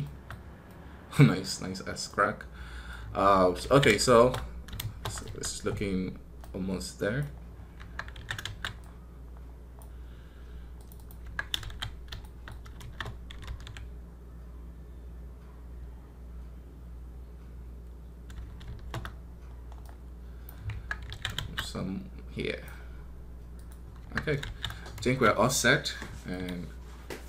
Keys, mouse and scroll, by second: 2.2-22.6 middle drag.